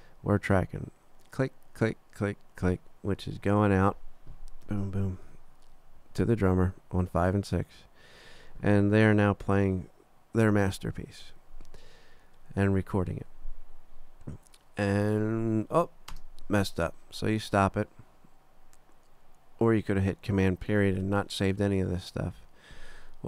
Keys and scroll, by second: 4.9 super+=, 10.4 super+=, 16.1 space.